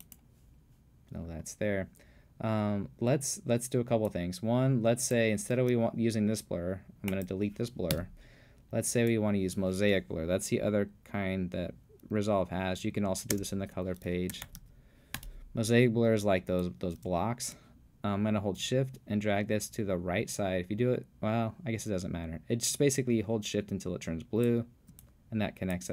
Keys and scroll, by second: 7.9 BackSpace, 13.3-15.1 typing, 15.2 Return.